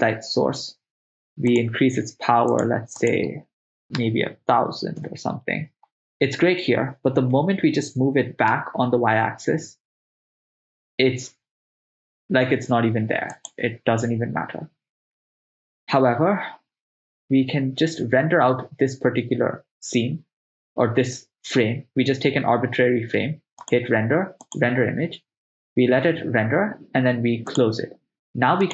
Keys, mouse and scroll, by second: 1.5 click, 2.5 click, 3.0-5.1 drag, 4.3 0, 4.4 0, 7.4 g, 8.6 y, 13.4 click, 23.6-25.1 drag.